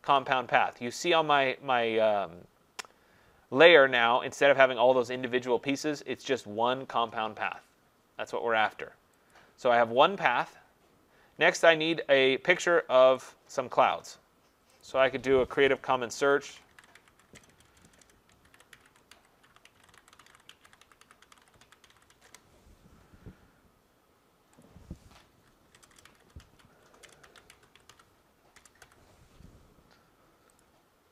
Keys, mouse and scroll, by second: 9.3 click, 13.3 click, 14.8 click, 15.9-22.6 typing, 24.6-29.7 drag, 25.1-29.3 typing, 30.4-31.1 typing, 30.6 click.